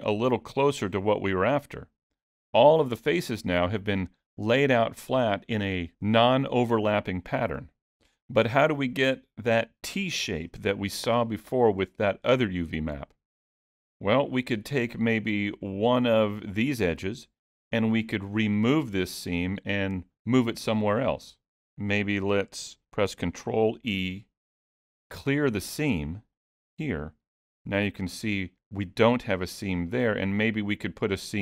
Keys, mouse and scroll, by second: 13.7 middle click, 15.6 click, 16.2 middle click, 23.8 ctrl+e, 27.8 alt+a, 29.9 middle click.